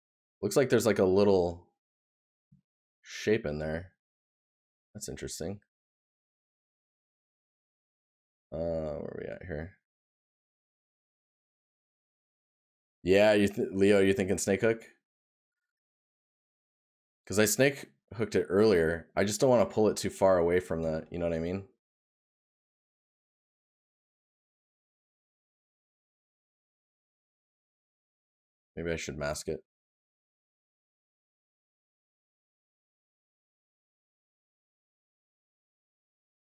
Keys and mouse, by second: 21.0 right click, 27.8 right click, 31.1 right click, 32.6 right click, 35.6 right click.